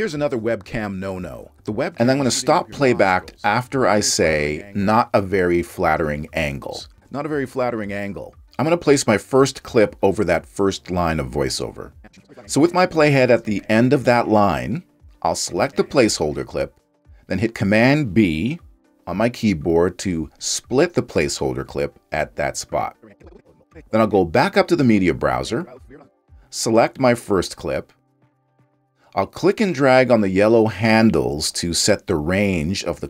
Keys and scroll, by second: 21.3 super+b.